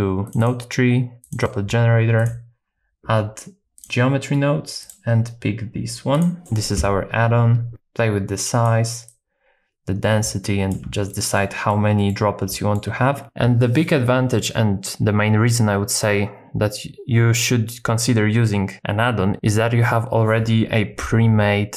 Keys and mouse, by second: 2.2-3.8 drag, 4.9-6.2 drag, 6.4 click, 7.7 shift+click, 9.2-10.7 shift+drag, 11.1 middle click, 11.7 middle click, 12.5 shift+middle click.